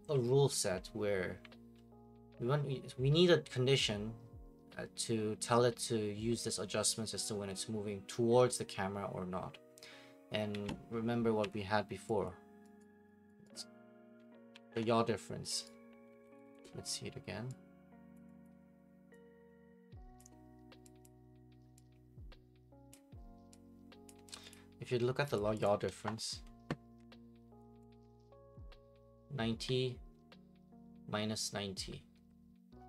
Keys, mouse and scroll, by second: 11.4 Escape, 12.2 click, 12.8 right click, 13.3 right click, 13.5 right click, 13.9-14.7 typing, 15.6 right click, 16.0-16.9 typing, 18.1 click, 18.4 click, 20.2 click, 21.0 click, 22.9 click, 24.1 click, 24.5 click, 25.3 click, 25.6 click, 27.9 click, 29.2 right click.